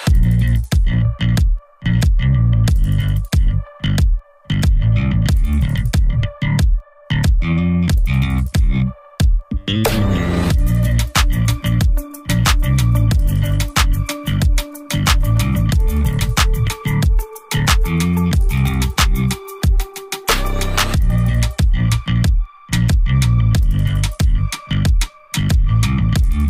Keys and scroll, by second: 0.8 e, 2.6 ctrl+z, 4.4 ctrl+z, 4.8 typing, 5.8-6.2 ctrl+z, 7.5 ctrl+KP_0.